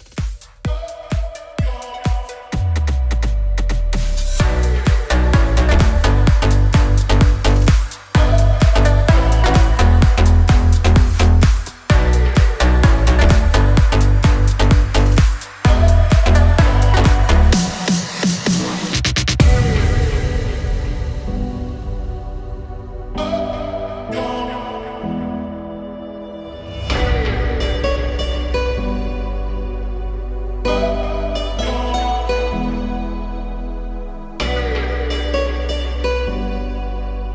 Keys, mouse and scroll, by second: 2.0 click, 3.5 click, 7.5 ctrl+f, 10.5 click, 14.3 click, 17.0 ctrl+shift+j, 22.8 click, 23.6 click, 26.3 ctrl+shift+j, 26.8 ctrl+shift+s, 31.1 click, 33.0-35.1 drag.